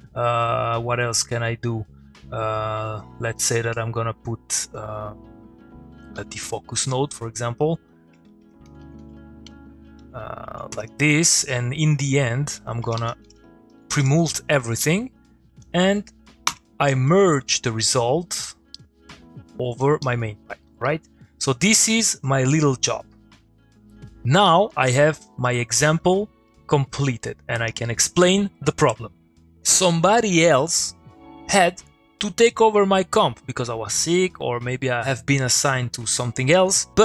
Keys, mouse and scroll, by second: 6.1-7.5 typing, 7.9 click, 8.4 Tab, 8.7-10.2 typing, 10.7 Return, 12.0 click, 12.8 Tab, 13.0 p, 13.7 Down, 13.9 Return, 14.9 click, 14.9 middle click, 15.6 click, 16.5 m, 16.8 middle click, 16.9 click, 17.1-17.7 middle click, 17.9-18.6 click, 19.3-19.9 click, 20.6 middle click, 21.6-22.3 click, 22.5 middle click, 23.7 click, 24.7 middle click, 25.2 click, 25.4 middle click, 27.0 click, 27.2 middle click.